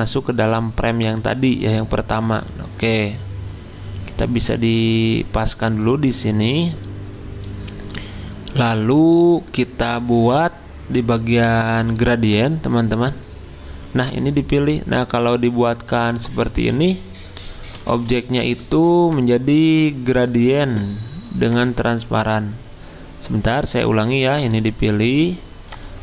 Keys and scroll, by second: 17.9 ctrl+z.